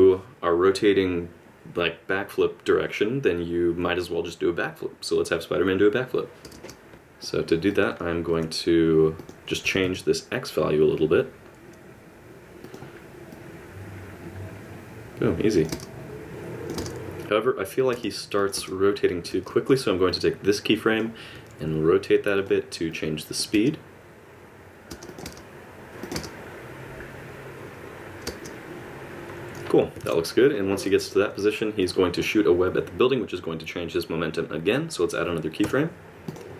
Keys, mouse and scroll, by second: 0.1 space, 2.7 space, 2.9 click, 3.1 space, 3.7 space, 6.9 click, 8.3 g, 9.6 g, 13.3 click, 15.7 space, 16.3 click, 16.8 space, 17.9 space, 18.4 click, 18.6 space, 19.5 middle click, 20.1 click, 21.3 r, 22.9 click, 23.5 space, 24.9 space, 25.1 click, 25.2 space, 25.9 click, 25.9 g, 26.0 click, 26.1 space, 28.2 space, 30.0 alt+a, 31.8 click.